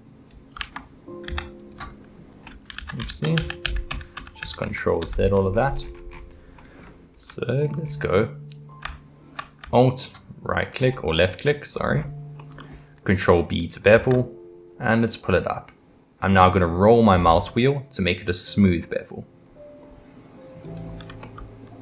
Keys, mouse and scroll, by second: 0.6 Tab, 1.3 x, 2.5 middle drag, 2.8 ctrl+z, 3.1 ctrl+z, 3.4 ctrl+z, 3.6 ctrl+z, 3.9 ctrl+z, 4.2 ctrl+z, 4.4 ctrl+z, 4.6 ctrl+z, 5.0 ctrl+z, 5.5-6.6 scroll up 17, 6.6-7.8 middle drag, 7.8 scroll up 4, 10.0 alt+click, 10.8-11.4 scroll down 3, 11.4 middle click, 11.9-12.4 scroll up 2, 12.4-13.9 middle drag, 13.9 ctrl+b, 21.2-21.8 middle drag.